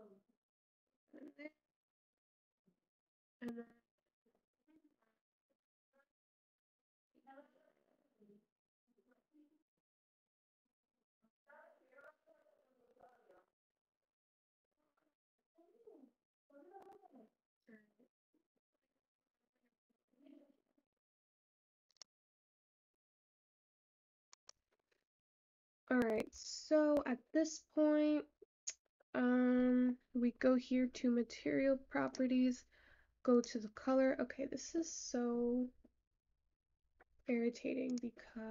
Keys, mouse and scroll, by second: 0.0-4.8 scroll down 5, 25.6-26.1 scroll up 3, 26.1-26.9 scroll down 5, 26.9 shift+middle click, 27.8-28.2 scroll down 1, 28.2-29.6 scroll up 7, 29.6-30.1 scroll down 6, 32.7 click, 33.8 click.